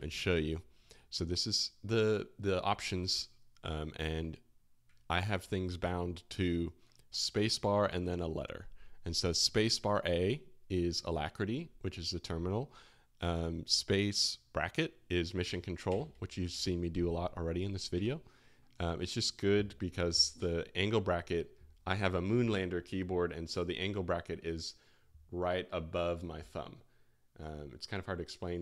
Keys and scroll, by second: 15.9 space, 15.9 [, 18.0 Home, 18.0 space, 18.0 [.